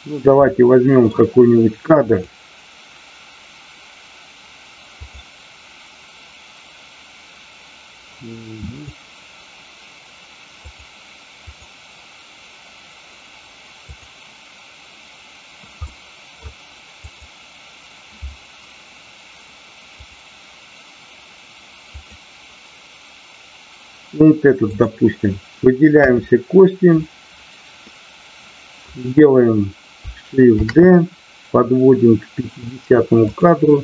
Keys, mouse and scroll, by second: 0.5 middle click, 2.1 click, 8.8 click, 10.6 click, 11.5 click, 13.9 click, 15.9 middle click, 17.0 click, 19.9 click, 21.9 click, 24.6 click, 27.8 middle click, 33.3 click.